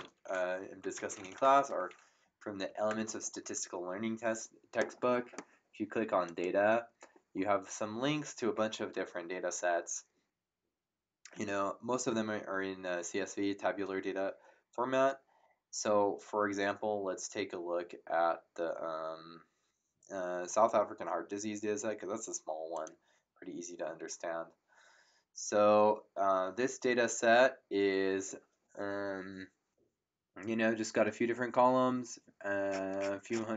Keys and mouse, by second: 0.6-2.0 typing, 2.6 Down, 2.9 Return, 6.2 click, 22.7 click.